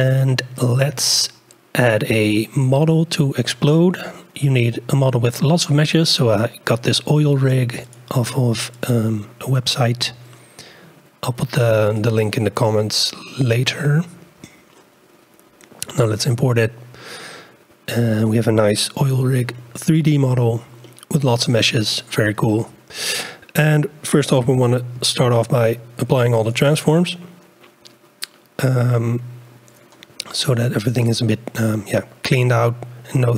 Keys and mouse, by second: 19.1 KP_Decimal, 20.8-22.1 middle drag, 25.3 ctrl+a.